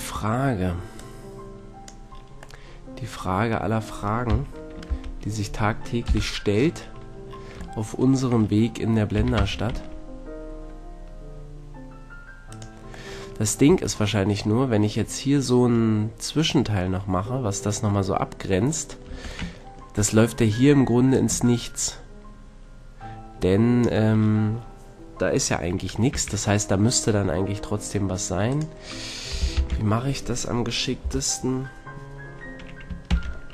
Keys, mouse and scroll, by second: 2.7-4.2 middle drag, 4.2 KP_1, 4.8 ctrl+KP_1, 6.0 KP_3, 9.1 e, 12.6 click, 13.6 Tab, 14.0-14.7 drag, 14.7 middle click, 15.0 middle drag, 15.4-15.9 middle drag, 19.0 Tab, 21.1-22.4 drag, 24.7-28.4 middle drag, 26.1 a, 28.4-30.2 drag, 29.5 ctrl+l, 31.0 KP_3, 33.0 shift+d.